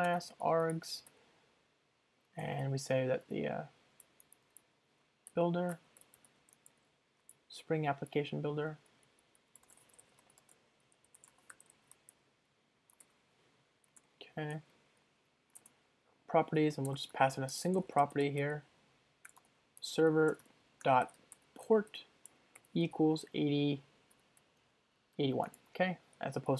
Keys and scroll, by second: 1.2 Return, 4.0 Escape, 12.3 super+Down, 14.0 alt+Return, 16.6 Return.